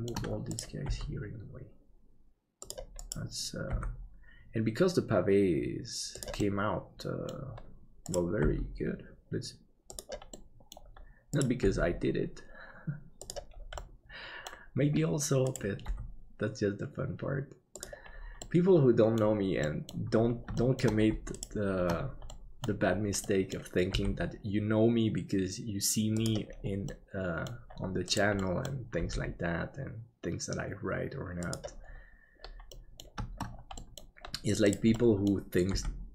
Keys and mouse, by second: 0.9 g, 3.0 right click, 3.7 g, 6.5 middle click, 8.4 g, 10.4 middle click, 11.4 right click, 13.9 middle click, 15.9 g, 18.4 middle click, 19.8 middle click, 20.6 shift+middle click, 22.3 middle click, 23.2 middle click, 23.9 g, 27.0 middle click, 28.4 middle click, 29.0 g, 32.7 middle click, 33.9 middle click, 34.9 middle click, 35.7 g.